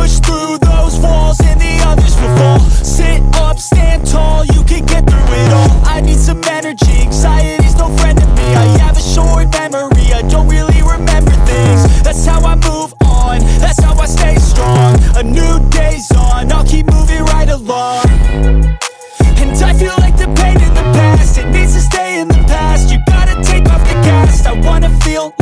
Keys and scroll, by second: 7.8 [, 7.8 [, 7.9 [, 15.4 ctrl+t.